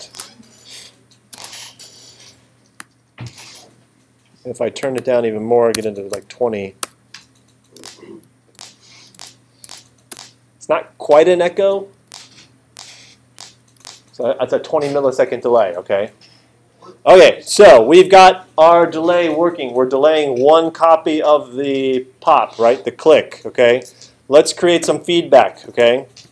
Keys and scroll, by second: 0.1 space, 1.3 space, 5.7 2, 6.1 0, 6.8 Return, 7.8 space, 12.1 space.